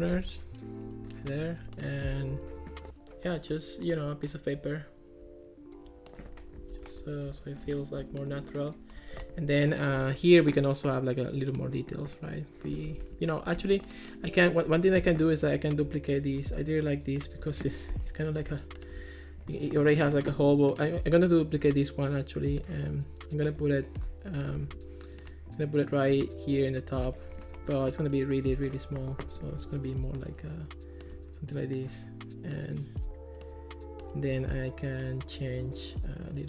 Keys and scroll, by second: 0.2 Escape, 7.0 Escape, 12.9 Escape, 13.6 Escape, 15.1 Escape, 17.9 Escape, 21.6 super+d, 24.6 super+z, 34.4 super+z.